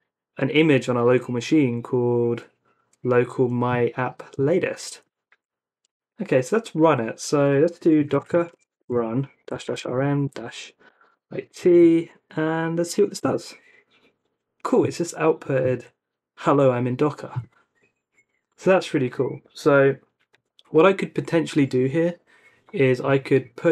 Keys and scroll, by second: 5.3 super+c, 7.7-11.4 typing, 11.7 super+v, 13.2 Return.